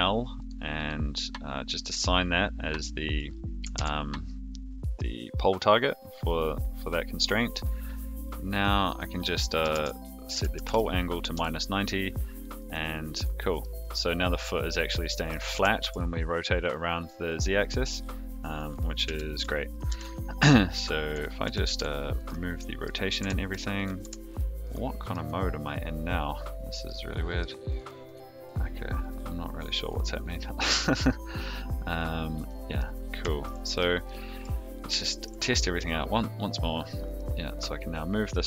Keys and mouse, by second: 0.7 click, 3.0-6.3 drag, 8.5-11.9 drag, 12.5 click, 13.1 click, 13.6-15.3 middle drag, 15.5 r, 19.0 a, 19.8 alt+g, 20.3 click, 20.7 a, 21.4 alt+g, 21.6 alt+r, 22.5 middle click, 23.2 Tab, 23.7 click, 24.0 Tab, 24.6 click, 25.0 click, 26.7-27.4 drag, 27.6 click, 30.6-31.4 drag, 32.4-32.7 middle drag, 33.2 shift+middle drag, 34.0-34.4 middle drag, 35.0 shift+middle drag, 35.4 g, 37.1-38.4 middle drag.